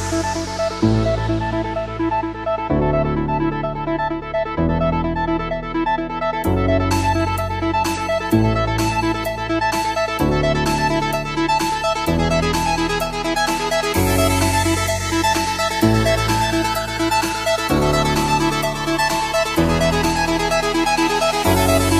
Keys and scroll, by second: 7.1 space, 7.2 ctrl+=, 11.1 ctrl+z, 13.9 ctrl+z, 18.8 ctrl+-, 20.3 ctrl+=.